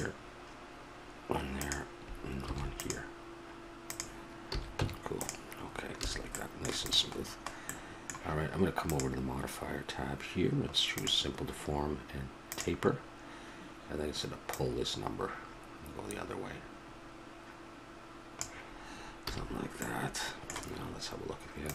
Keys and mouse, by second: 2.4 ctrl+r, 4.5 a, 4.8 Tab, 5.6 middle click, 6.0 a, 6.8 right click, 8.9-10.7 drag, 12.5-14.4 drag, 14.5-16.3 drag, 19.2 a, 19.4-21.7 middle drag.